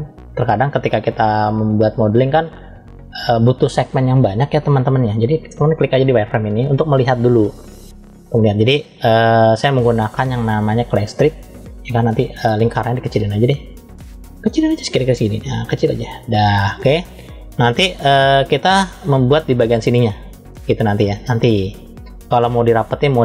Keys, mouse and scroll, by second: 14.3 f, 16.9 middle click.